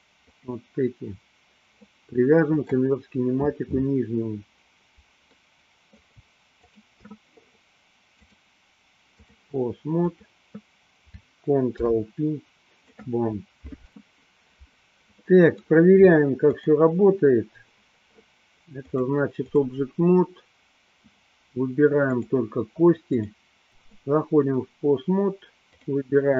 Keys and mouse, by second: 0.5 click, 1.9-2.9 middle drag, 5.4 middle click, 6.7 shift+click, 8.4-9.5 drag, 10.2 click, 11.9 ctrl+p, 15.2-16.0 middle drag, 16.7 click, 18.8-19.7 drag, 22.1 click, 23.4 click, 23.7 click, 25.8 click.